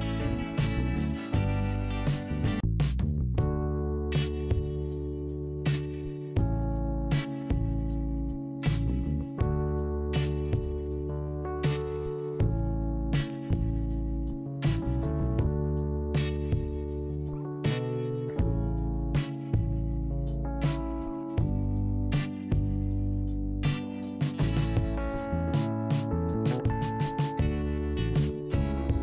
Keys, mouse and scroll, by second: 1.5 scroll down 1, 2.4 click, 3.9 click, 4.9 click, 6.5 click, 10.5 scroll down 1, 11.9 scroll up 1, 12.5-13.0 scroll down 1, 13.0-14.2 scroll up 1, 14.5 click, 15.0-15.9 scroll down 1, 15.9 click, 16.0 scroll down 1, 16.0 click, 17.6 click, 20.5 click, 20.7 click, 21.4 click, 22.2 click, 23.3 click, 25.9 click, 27.5 click, 27.9 scroll down 1.